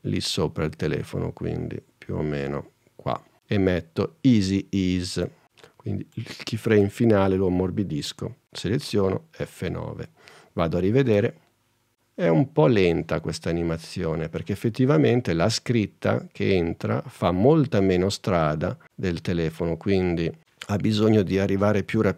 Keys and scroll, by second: 9.0 F9, 11.2 space.